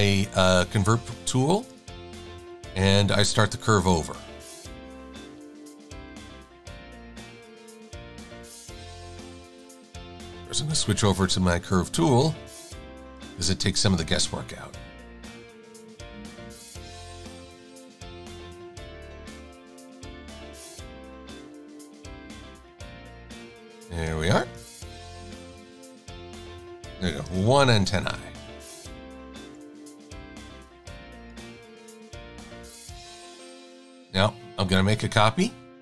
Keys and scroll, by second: 28.1 shift+super+a, 29.1 super+-, 29.3 super+-, 29.9 super+=, 30.8 v.